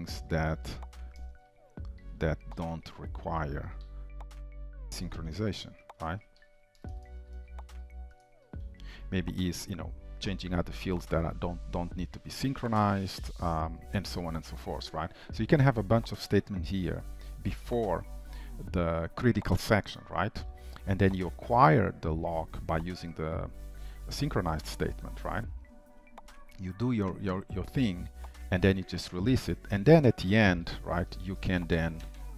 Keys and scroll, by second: 9.0 ctrl+s, 16.0 ctrl+d, 30.7 ctrl+c.